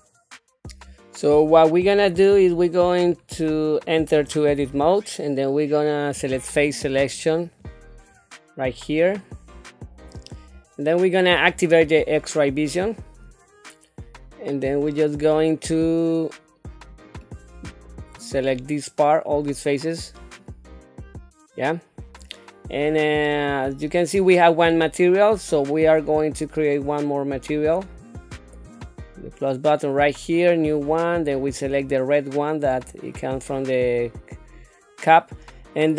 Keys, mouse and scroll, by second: 2.1 shift+middle click, 3.1 scroll up 2, 3.7 shift+middle click, 4.6 Tab, 7.4 click, 10.0 click, 12.8 click, 16.9 click, 17.3-20.4 drag, 28.6 click, 30.5 click, 31.5-33.3 drag.